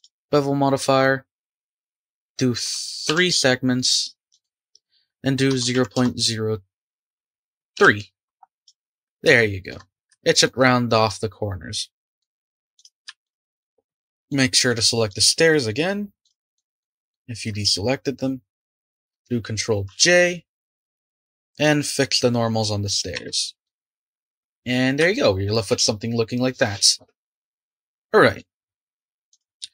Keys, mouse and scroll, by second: 1.7-4.3 drag, 4.5-7.1 drag, 8.5 click, 9.4 shift+middle click, 9.8 scroll up 3, 10.1-10.6 shift+middle drag, 10.6-11.0 scroll up 1, 11.0-12.4 middle drag, 12.4-12.7 right drag, 12.7 click, 13.2 shift+click, 13.6 shift+click, 14.3 shift+drag, 14.7 shift+drag, 15.1 shift+click, 15.7 shift+click, 16.2 shift+click, 16.5 shift+click, 16.8 shift+click, 17.1 shift+click, 19.9 ctrl+j, 20.9 click, 22.0 click, 23.1 Tab, 23.6 click, 23.9-24.9 middle drag, 24.9 scroll down 2, 25.1-28.1 shift+middle drag, 28.4-28.9 middle drag, 29.3 click.